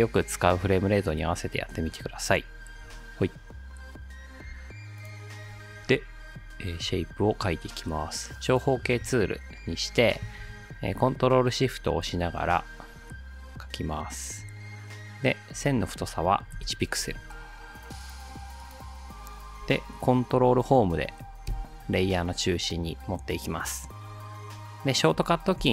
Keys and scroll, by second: 16.5 ctrl+shift+1, 17.0 Return, 21.5 ctrl+Home, 25.6 r.